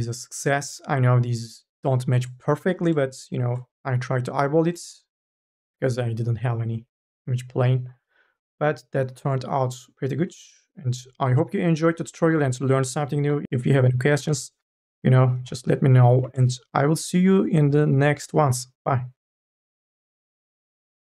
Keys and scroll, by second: 14.1 n, 14.5 b, 15.6 a.